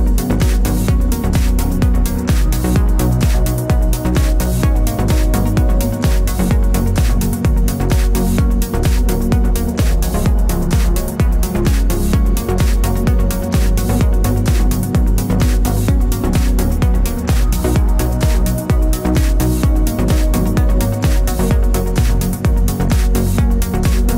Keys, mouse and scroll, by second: 0.3 KP_Enter, 3.5 shift+click, 3.7 shift+drag, 3.9 shift+click, 4.1 x, 6.6 click, 7.0 Tab, 8.2 click, 8.8 z, 14.5 shift+click, 14.7 Tab, 15.0 click, 16.9-18.1 middle drag, 18.1 click, 18.3 shift+click, 18.5 scroll down 1, 18.8 z, 19.1 middle click, 19.3 Tab, 20.0 click, 20.5-24.1 middle drag, 20.9 g, 24.0 Tab.